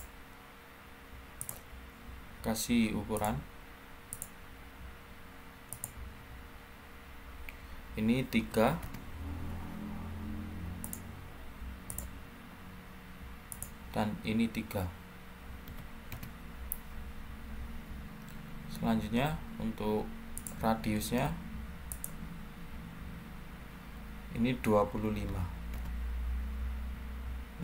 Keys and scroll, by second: 8.3 3, 8.7 Return, 15.6 3, 16.0 Return, 24.8-25.2 typing, 25.6 Return.